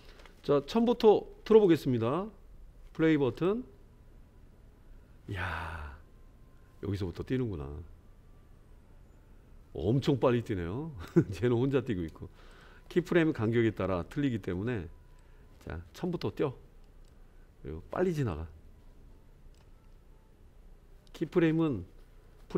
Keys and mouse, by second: 1.5 click, 3.4 click, 12.0 space, 12.5 click, 15.2-17.1 drag, 18.3-19.6 drag.